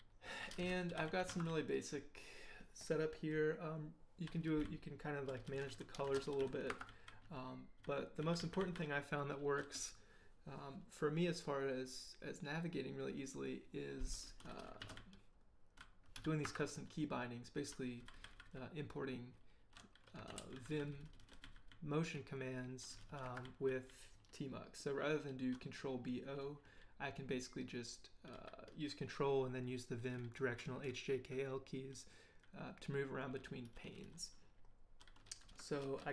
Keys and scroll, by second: 0.4-2.0 typing, 3.3 j, 3.8 j, 4.4 k, 4.6 k, 5.8-8.2 typing, 14.6-18.1 typing, 16.4 Escape, 20.0-23.9 typing, 23.2 Escape, 32.7 j, 33.6 k, 33.8 k.